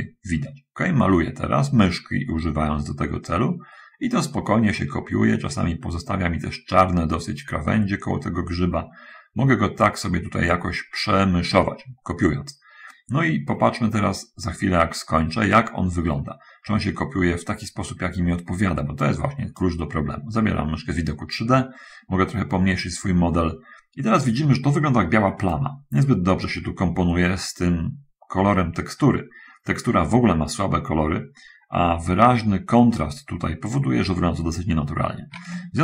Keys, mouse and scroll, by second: 22.1-22.5 scroll down 2, 22.8-23.1 scroll down 2.